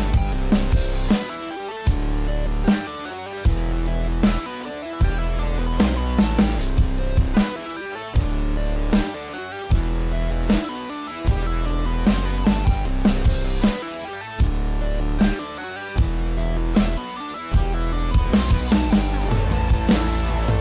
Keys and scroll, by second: 7.4 space, 13.1 space.